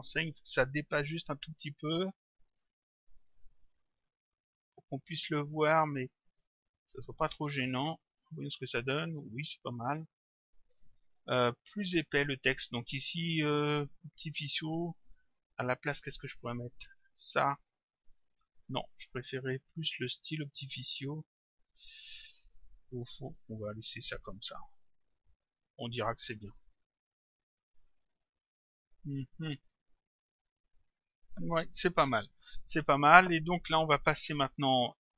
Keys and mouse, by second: 1.8 click, 3.7 click, 7.4 click, 10.2 click, 11.8 click, 14.6 click, 16.4 click, 18.0 click, 23.2 click, 26.5 click, 30.4 click, 34.7 click.